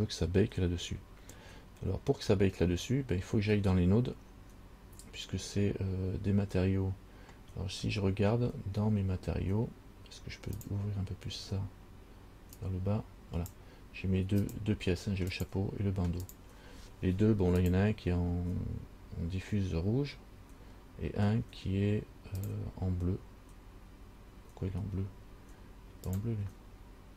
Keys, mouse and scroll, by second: 12.8 click, 14.6 click, 15.5 click, 16.4 click, 17.8 click, 22.6 click, 26.3 click.